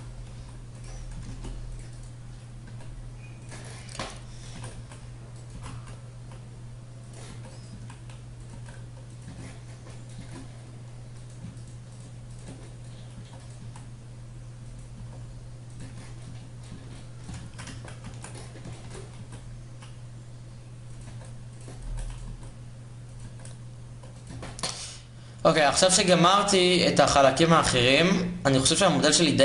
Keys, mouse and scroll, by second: 0.9 ctrl+Tab, 2.4 e, 4.2 g, 5.2 g, 7.0 e, 7.4 s, 9.0 Tab, 9.9 Tab, 12.9 e, 13.3 s, 14.5-15.5 drag, 15.5 Tab, 16.4 Tab, 17.1 ctrl+z, 18.9 s, 20.7 e, 21.5 e, 22.0 s, 22.9 e, 24.0 Tab.